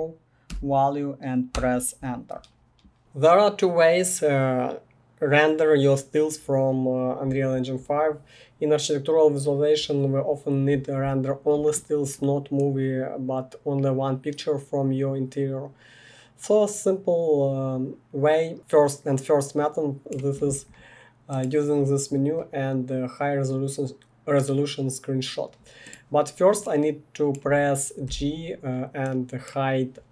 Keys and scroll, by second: 0.5 0, 1.5 Return, 28.0 g.